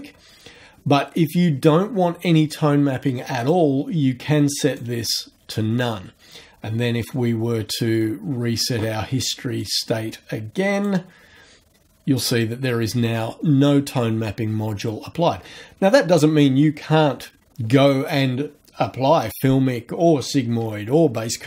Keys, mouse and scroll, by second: 3.4 click, 4.7 click, 7.0 click, 9.6 click, 10.8 click.